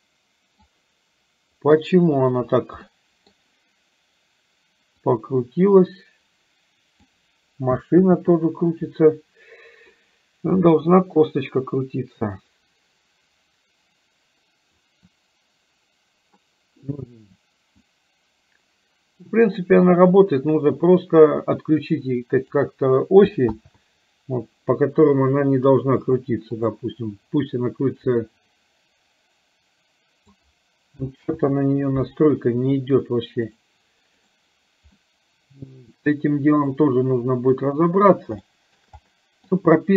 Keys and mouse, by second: 2.9 middle click, 5.0-7.0 drag, 8.2 ctrl+z, 17.9-22.5 drag, 23.7 ctrl+z, 26.2 click, 26.5 click, 28.3 click, 28.5-30.4 drag, 31.4 ctrl+z, 35.0-37.5 middle drag, 38.5 shift+middle click, 39.2 middle click.